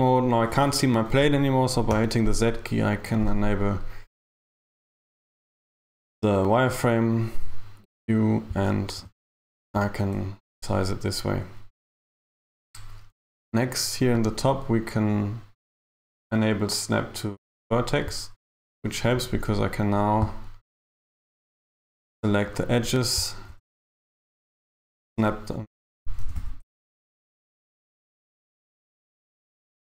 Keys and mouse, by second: 0.0 Tab, 2.4 z, 8.9 a, 9.7 a, 11.0 a, 14.2 click, 19.2 right click, 21.4 click, 22.6 right click, 23.6 g, 24.0 t, 25.7 right click, 26.3 g.